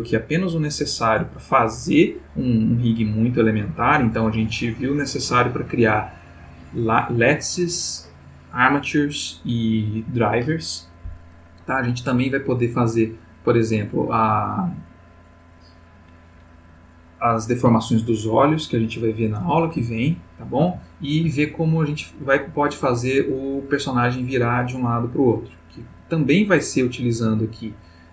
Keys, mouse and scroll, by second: 12.5 click, 19.9-20.8 ctrl+middle drag, 20.8-21.4 ctrl+shift+middle drag, 26.5 click.